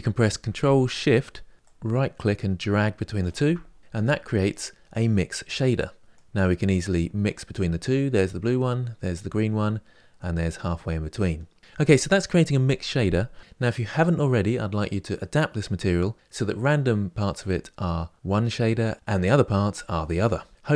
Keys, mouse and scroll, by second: 1.5 ctrl+z, 2.9-3.8 ctrl+shift+right drag, 3.8 click, 6.1-9.2 drag.